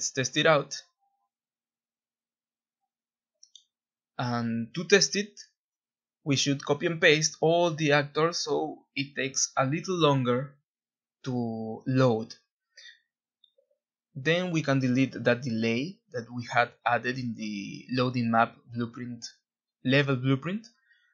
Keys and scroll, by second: 2.9 ctrl+z, 9.9 ctrl+b, 12.6 ctrl+a.